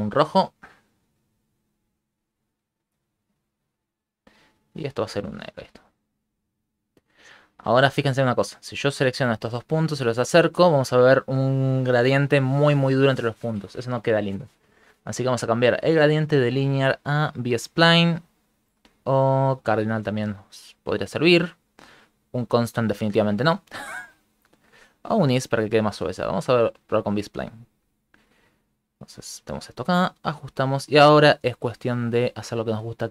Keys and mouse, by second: 0.2 click, 0.7 click, 4.7 click, 5.3 click, 6.6 click, 7.9 click, 9.6 click, 15.7 click, 18.2 click, 20.8 click, 23.6 click, 25.9 click, 27.9 click, 28.8 click, 30.0 click, 30.7 click, 32.2 click, 32.6 click, 33.0 click.